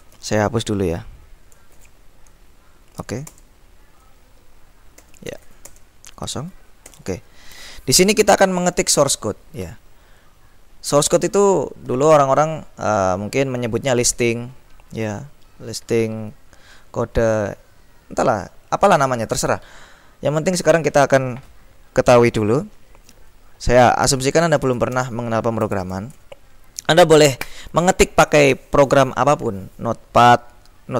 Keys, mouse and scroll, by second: 0.0-0.7 typing, 1.8 shift+8, 3.4 Return, 5.1 ctrl+l, 5.5 ctrl+s, 5.8 ctrl+Return, 7.0 ctrl+l, 9.2-11.0 drag, 11.0-11.5 scroll up 2, 24.5-25.3 typing.